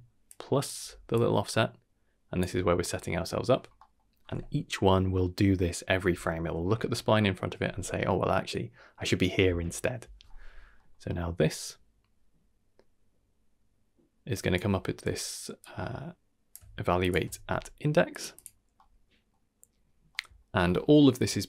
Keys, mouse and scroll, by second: 0.0-0.7 typing, 0.2-0.7 drag, 1.1-2.4 drag, 2.4 d, 3.3 d, 3.5 scroll down 2, 3.7 middle click, 10.7 middle click, 11.6-14.5 drag, 15.6-16.5 drag, 17.0 shift+click, 17.3 g, 18.3 click, 18.7-19.3 middle drag, 20.1 middle drag.